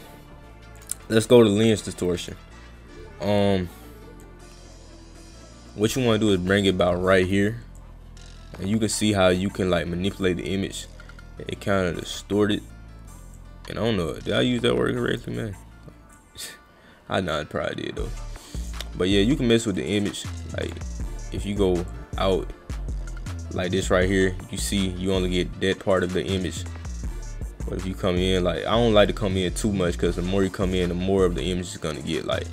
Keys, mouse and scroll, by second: 0.8 click, 1.6 click, 2.2 click, 4.2-6.7 drag, 7.8-12.0 drag, 13.4-15.2 drag, 16.2-18.7 drag, 19.8 click, 21.9-32.5 drag.